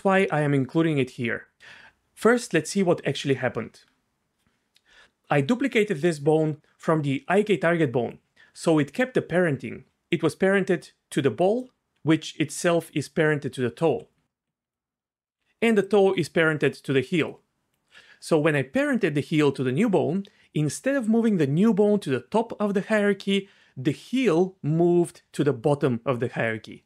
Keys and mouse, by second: 2.8 Tab, 5.3 g, 8.1 right click, 9.9-13.9 d, 10.1 click, 14.6-17.8 d, 15.8 click, 17.3 right click.